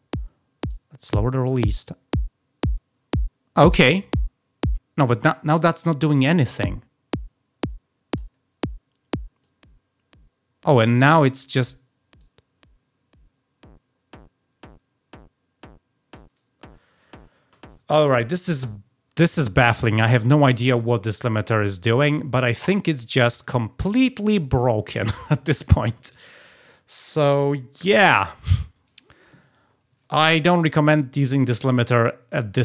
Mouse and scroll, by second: 0.6-3.5 drag, 6.1-8.1 drag, 9.3-11.6 drag, 12.1-16.1 drag, 31.7 click.